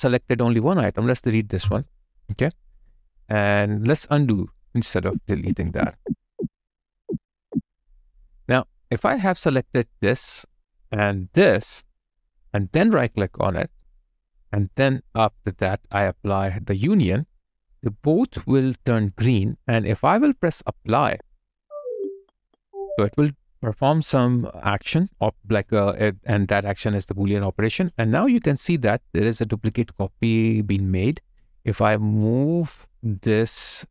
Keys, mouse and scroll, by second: 1.4 Delete, 3.5 Delete, 4.9 ctrl+z, 8.3 ctrl+click, 8.9 double click, 11.8 shift+click, 12.7 right click, 30.4 alt+right click, 30.8 alt+click.